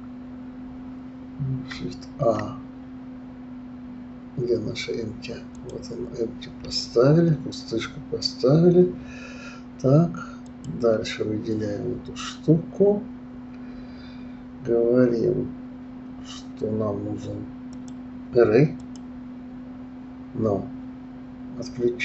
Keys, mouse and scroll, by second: 2.1 shift+a, 10.4 click, 17.7-20.7 drag.